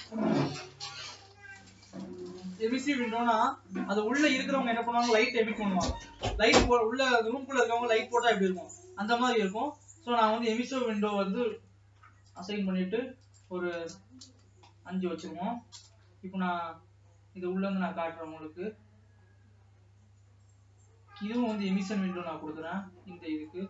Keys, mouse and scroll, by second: 2.6 s, 3.5 ctrl+s, 5.4-6.9 drag, 6.9-7.5 scroll down 3, 9.4 click, 12.5-15.8 drag, 15.8 KP_0, 17.5-18.4 scroll down 2, 18.4-21.7 scroll down 4, 21.7 click, 23.0-23.6 middle drag.